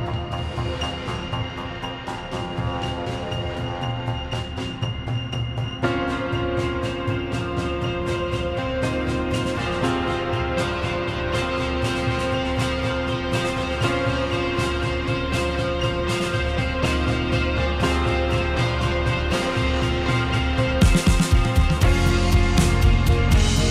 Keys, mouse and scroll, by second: 0.3-0.7 middle drag, 0.7 click, 1.7 r, 2.2 click, 2.4-3.6 middle drag, 3.6 drag, 4.2 r, 4.6 click, 4.7-6.2 middle drag, 6.2 click, 6.4-7.6 middle drag, 7.6 r, 8.4 s, 8.8 drag, 9.1 drag, 9.2-9.5 middle drag, 9.5 drag, 9.7-10.0 middle drag, 10.0 drag, 10.7-11.7 middle drag, 12.7 `, 14.7 r, 16.1 click, 16.4 r, 17.4 click, 17.5 r, 18.3 click, 18.6-20.3 middle drag, 20.3 drag, 21.1 r, 22.0-22.3 middle drag, 22.3 r, 22.7 drag, 22.8-23.7 middle drag.